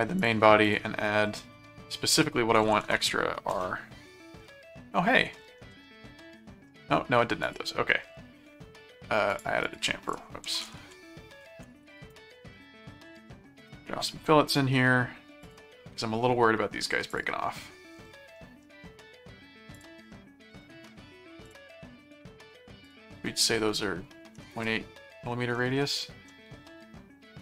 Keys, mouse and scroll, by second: 0.2 click, 1.4 middle click, 1.9-3.6 typing, 5.8 middle click, 6.7-7.1 scroll up 2, 7.4 click, 8.1 scroll down 2, 9.3 click, 10.2-13.6 typing, 15.4 click, 17.1 click, 18.4 middle click, 19.7 click, 21.5 click, 22.8 click, 26.0 middle click.